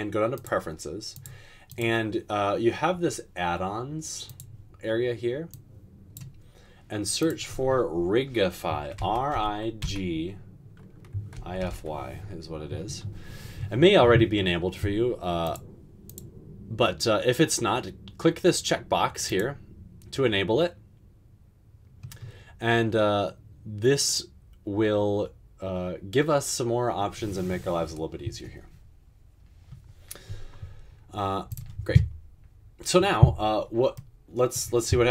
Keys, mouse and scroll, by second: 9.2-9.8 typing, 11.4-11.7 typing.